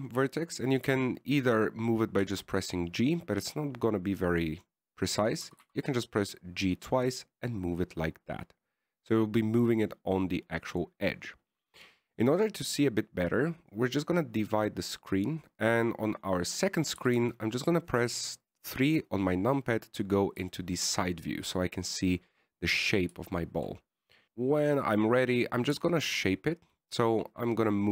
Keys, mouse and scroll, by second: 3.5 g, 6.8 g, 15.0 click, 18.3 t, 18.5 KP_3, 21.8 shift+middle click, 22.4-24.2 scroll up 1, 24.2 shift+middle click, 24.2-24.6 scroll up 2, 25.0 right click, 26.0 right click, 27.0 g.